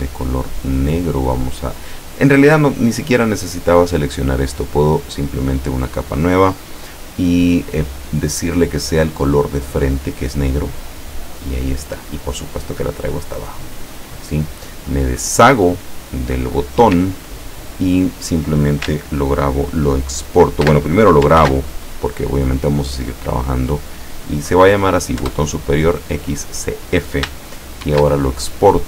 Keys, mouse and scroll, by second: 4.6 click, 9.5 click, 10.4 click, 12.2 click, 15.7 click, 17.3-18.1 ctrl+scroll down 3, 21.4 ctrl+s, 25.2 Return, 27.9 ctrl+shift+e.